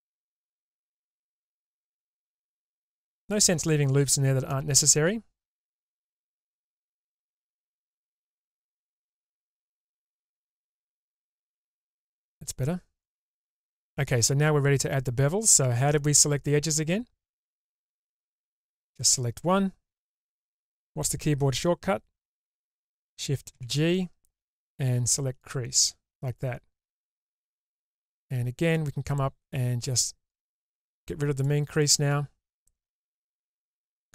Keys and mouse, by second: 1.1 alt+click, 3.7 ctrl+x, 4.6-6.8 middle drag, 8.5 alt+click, 11.3 ctrl+x, 12.1 middle click, 23.7 shift+g, 28.8 click, 30.5-31.6 drag.